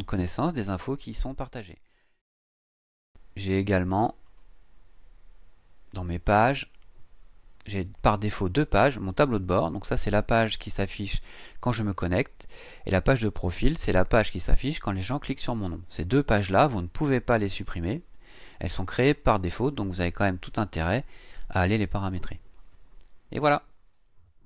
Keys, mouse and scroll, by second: 0.3-0.8 scroll down 2, 2.2 click, 4.3 click, 6.1 click.